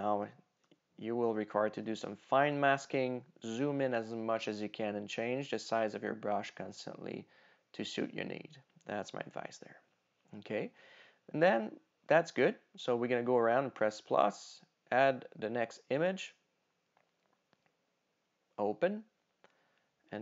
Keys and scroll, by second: 0.7 super+-, 2.5 super+=.